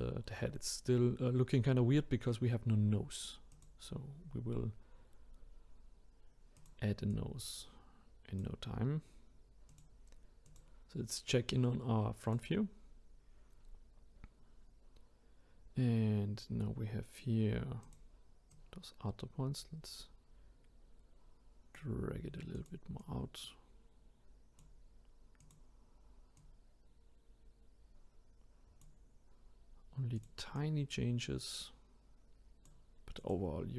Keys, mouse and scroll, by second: 3.5 click, 6.6 click, 9.7 click, 10.4 click, 12.2 click, 13.1-14.5 scroll up 1, 17.8 click, 18.5 click, 22.5 click, 23.0 click, 25.4 click, 26.4 click, 30.1 click, 30.5 click, 33.2 click.